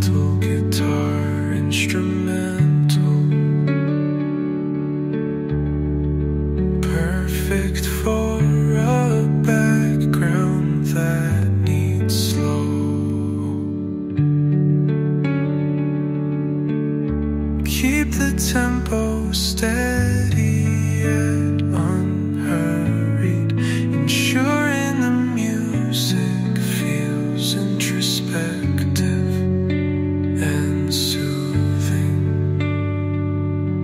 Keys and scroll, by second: 6.7 h, 8.5 space, 23.5 ctrl+z.